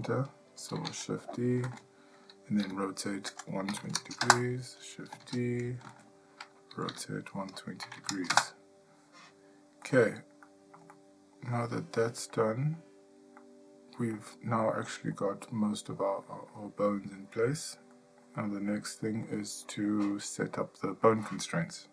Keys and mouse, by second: 0.9 shift+d, 2.6 r, 5.2 shift+d, 6.9 r, 9.8 middle click, 10.5 shift+middle click, 10.9 middle click, 11.8 middle click, 12.4 shift+middle click, 13.4 middle click, 14.6 shift+middle click, 15.1 middle click, 16.3 shift+middle click, 16.8 middle click, 17.9 shift+middle click, 19.3 middle click.